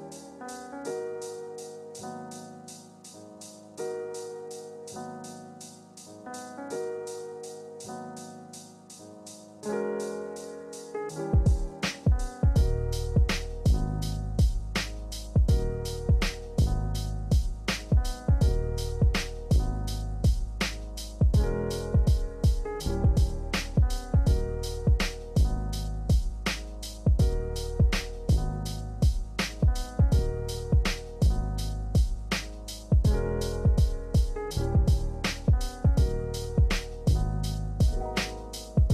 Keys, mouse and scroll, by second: 1.9 click, 3.4-4.8 typing, 4.7-5.7 scroll down 1, 5.7 click, 8.0-9.9 drag, 28.2 click, 29.1-30.1 scroll up 1, 31.3 click, 34.1 space, 34.4-38.9 alt+drag.